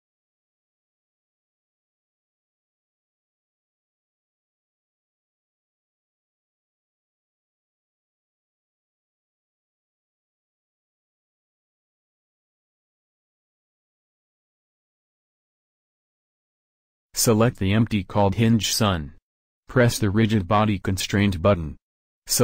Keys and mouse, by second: 2.6 middle click, 5.8 click, 7.0-8.4 drag, 9.9-11.8 drag, 12.0-15.5 drag, 17.9-19.1 drag, 19.9-21.8 drag, 22.1-22.4 drag.